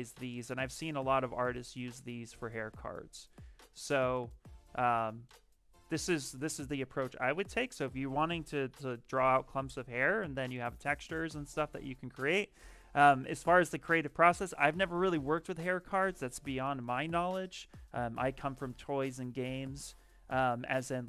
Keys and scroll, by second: 6.3 b.